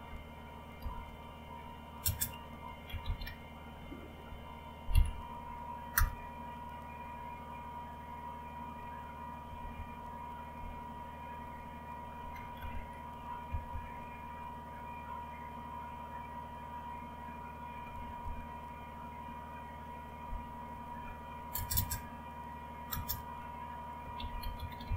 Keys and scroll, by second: 0.8 typing, 2.0-3.8 typing, 4.9-6.4 typing, 9.5 Up, 12.0 Down, 13.5 Up, 13.7 Up, 17.8 Up, 20.7 #, 21.5 space, 21.7 space, 22.8 space, 24.1-24.9 typing.